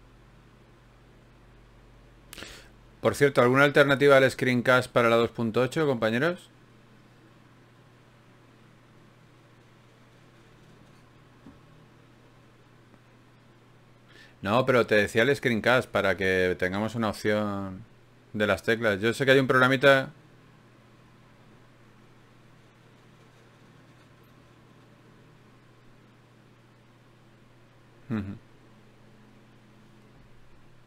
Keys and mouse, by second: 0.6 n, 1.4-16.7 middle drag.